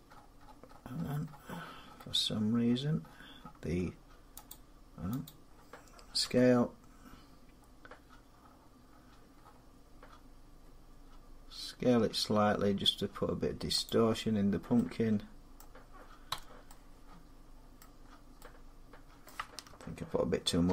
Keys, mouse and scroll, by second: 0.0-2.4 scroll, 2.4 scroll down 10, 5.0 click, 6.0 s, 8.2 middle click, 8.3 middle click, 8.7 middle click, 8.8 middle click, 8.9-9.6 scroll, 13.6 click, 14.3 scroll, 14.9 scroll down 2, 15.3 middle click, 16.1 Tab, 17.5 middle click, 17.7-18.2 scroll, 19.0 middle click, 20.5 ctrl+z.